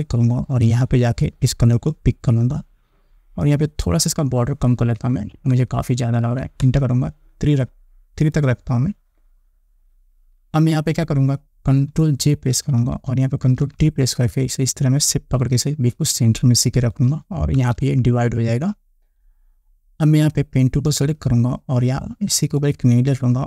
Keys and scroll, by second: 5.4 3, 7.0 Return, 13.0 ctrl+j, 13.9 ctrl+t, 18.0 Return.